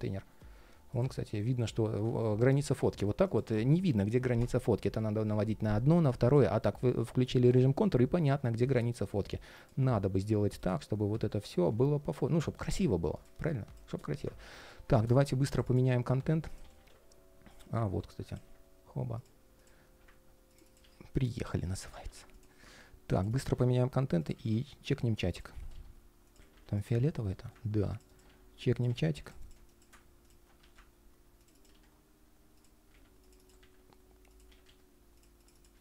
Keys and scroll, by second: 0.1 ctrl+shift+3, 1.3 ctrl+shift+3, 2.3 ctrl+shift+3, 2.7 ctrl+shift+4, 6.3 ctrl+shift+3, 9.7 ctrl+shift+3, 10.9 ctrl+shift+3, 12.2 ctrl+shift+3, 15.5 super+c, 16.3 super+a, 17.0 shift+super+v, 20.5 super+c, 21.5 super+a, 23.2 super+c, 24.1 super+a, 24.3 shift+super+v, 25.2 super+a, 25.4 super+c, 26.1 super+a, 26.3 shift+super+v, 26.7 ctrl+shift+3, 28.0 super+c, 28.7 shift+super+a, 29.2 shift+super+v, 32.6 super+a, 33.3 shift+super+v, 34.2 super+a, 34.4 super+c, 35.5 super+a.